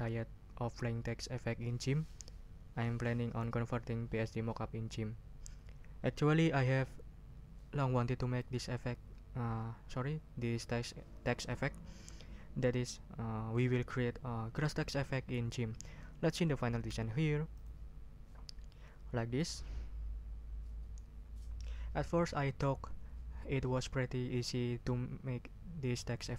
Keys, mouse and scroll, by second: 17.5 click.